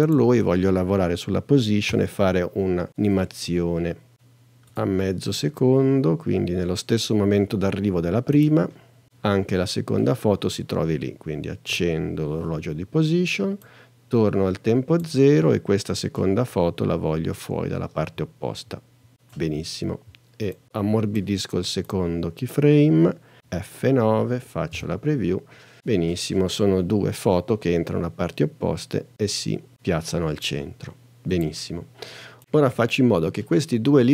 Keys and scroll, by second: 1.9 p, 23.4 F9, 24.8 space.